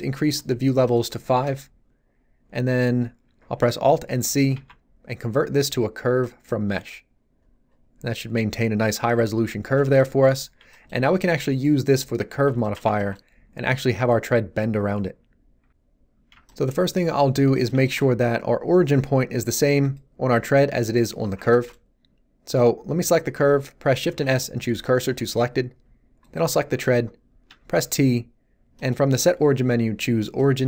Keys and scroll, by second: 4.5 alt+c, 24.0 shift+s, 27.4 t.